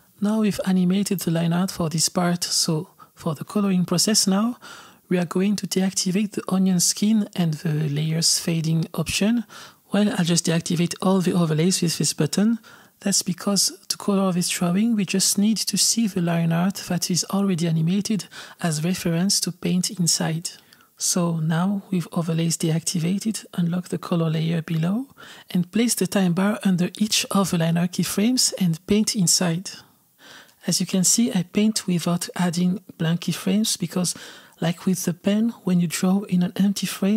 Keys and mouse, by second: 6.0-9.0 drag, 11.8 click, 23.4 click, 24.7 click, 25.6-29.8 drag, 31.4 click, 34.4-36.6 drag, 36.9 click.